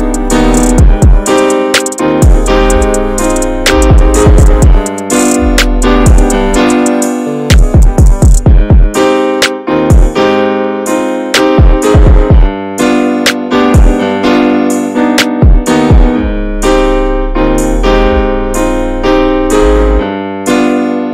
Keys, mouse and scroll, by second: 2.1 scroll down 3, 2.2 middle click, 2.5-3.6 scroll up 3, 2.7 shift+middle click, 3.0 middle click, 3.9 click, 4.7 middle click, 5.5 ctrl+r, 6.2 s, 7.1 scroll down 2, 7.3 middle click, 7.7 s, 8.2 shift+middle click, 8.6 ctrl+b, 10.4 Tab, 10.5-10.8 scroll down 2, 10.8 middle click, 11.0-11.6 scroll up 3, 11.2 shift+middle click, 11.6-12.0 shift+middle drag, 12.2 Tab, 12.5 middle click, 13.2 alt+z, 13.5 scroll down 2, 13.7 alt+middle click, 14.2 click, 15.7 s, 17.3 alt+z, 17.6 middle click, 17.8-18.3 scroll up 2, 18.3 middle click, 18.7 shift+middle click, 18.8-19.4 scroll up 3, 19.1 middle click, 19.9 2, 20.0 click, 20.6 alt+shift+click, 21.0 s.